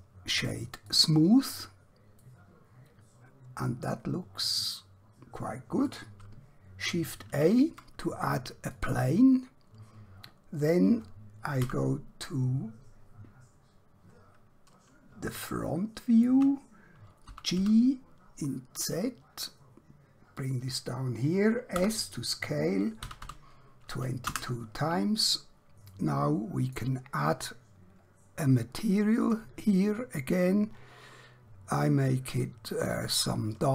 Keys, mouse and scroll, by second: 0.9 click, 2.3 middle click, 7.2 shift+a, 8.6 click, 11.6 KP_1, 14.2 scroll down 1, 15.5 shift+middle click, 17.4-17.8 typing, 20.4 click, 21.8 s, 23.3 typing, 24.3 Return, 26.0 middle click, 29.3 click, 31.8 click.